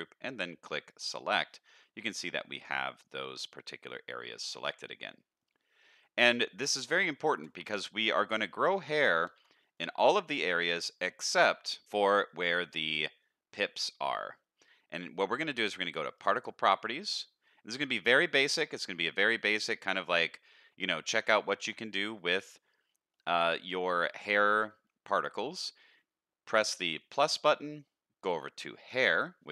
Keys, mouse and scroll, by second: 0.9 click, 1.6 middle click, 2.7 middle click, 3.7 middle click, 4.3-5.4 middle drag, 6.7 middle click, 7.3 Tab, 7.6-8.4 middle drag, 9.2 shift+middle click, 9.6 middle click, 16.2 click, 19.2 middle click, 19.7 shift+middle drag, 20.1-20.5 middle drag, 21.1 middle click, 23.1 middle drag, 24.0 middle click, 24.8 middle click, 27.0 click, 28.8 click.